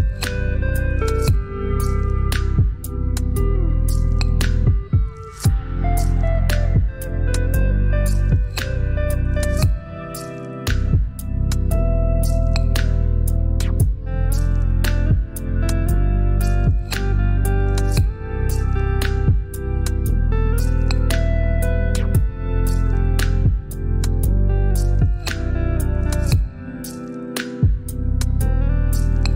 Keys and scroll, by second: 2.3 space, 2.9 space, 6.4 Return, 11.3 i, 20.8 ctrl+BackSpace, 21.8 ctrl+d, 24.5 v.